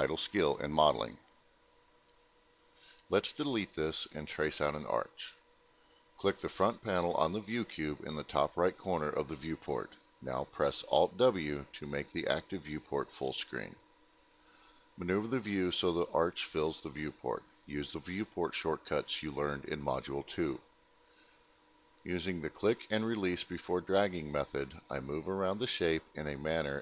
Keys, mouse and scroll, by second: 0.6 click, 4.0 click, 5.3 click, 8.0 click, 8.4 click, 9.0 middle click, 9.6 click, 11.1 click, 12.5 middle click, 12.8 ctrl+alt+middle click, 13.3 middle click, 13.9 middle click, 14.6 ctrl+alt+middle click, 16.1 click, 17.0 click, 17.9 click, 18.9 shift+click, 20.2 click, 21.2 click, 22.2 shift+click, 23.2 shift+click, 24.6 shift+click, 26.2 click.